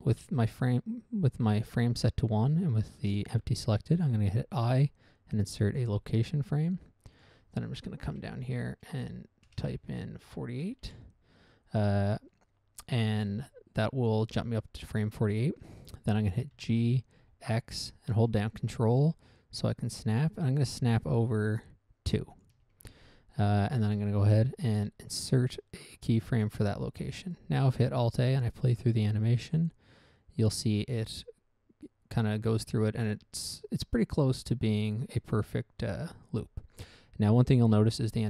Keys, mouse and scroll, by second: 4.6 i, 6.0 click, 7.5 click, 8.5 typing, 9.8-11.2 typing, 11.2 Return, 16.9 g, 22.7 ctrl+click, 26.7 click, 28.4 alt+a.